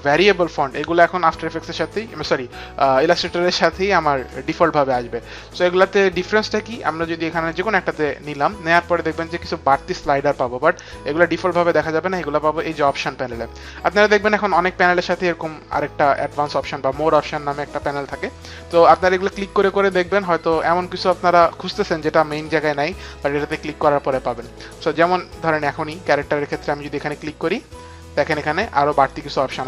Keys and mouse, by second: 8.1 click, 19.0 click, 21.4 click, 23.1 click, 24.3 click, 26.9 click.